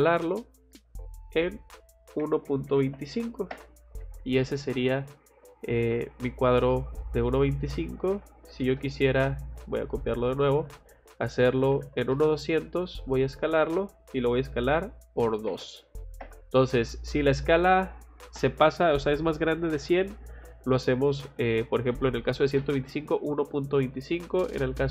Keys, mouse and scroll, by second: 0.0-0.2 typing, 0.4 middle click, 1.2 click, 4.0 Escape, 4.2 middle click, 7.2 click, 7.4 click, 8.1 c, 8.5 o, 8.6 space, 9.0 click, 10.2 click, 10.4 Escape, 10.6 Escape, 10.7 click, 10.9 click, 11.4-12.3 typing, 12.4 middle click, 13.2 click.